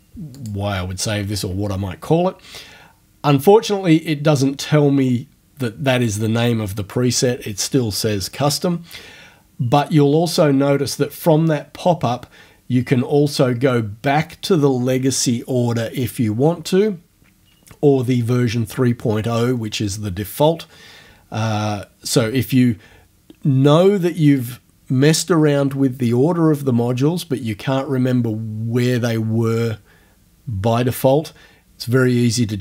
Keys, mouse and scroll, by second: 0.4 click, 10.3 click.